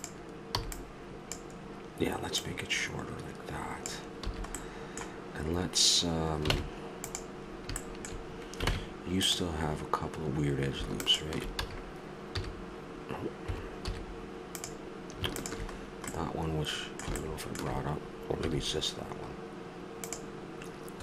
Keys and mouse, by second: 0.6 b, 1.6 click, 2.4-4.2 drag, 4.2 a, 4.6-6.2 middle drag, 6.5 ctrl+Tab, 9.6 ctrl+Tab, 11.6 a, 12.9 x, 14.6 z, 18.4 x.